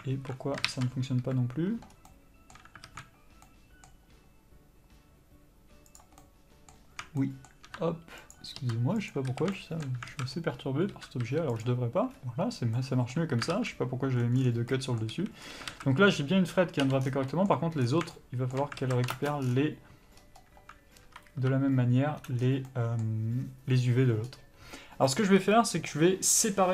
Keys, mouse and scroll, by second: 0.1 alt+a, 0.6 ctrl+z, 1.1 KP_Decimal, 1.9 scroll up 1, 2.0 middle click, 2.8 alt+a, 3.4 middle click, 5.8 click, 6.2 middle click, 7.2 shift+middle click, 8.3 ctrl+click, 9.0 ctrl+e, 9.2 a, 9.5 shift+middle click, 10.1 alt+a, 10.8 l, 11.6 u, 13.5 alt+a, 14.3 scroll down 1, 14.7 middle click, 15.1 a, 15.4 scroll up 1, 15.7 alt+a, 16.7 l, 17.0 scroll down 1, 17.3 middle click, 17.8 scroll down 1, 18.1 shift+middle click, 18.7 alt+a, 19.1 ctrl+space, 19.1-26.7 middle drag, 19.4 scroll down 1, 20.2-21.5 scroll up 1, 21.5 1, 22.4 scroll down 1, 24.2-25.3 scroll up 1, 25.3 a.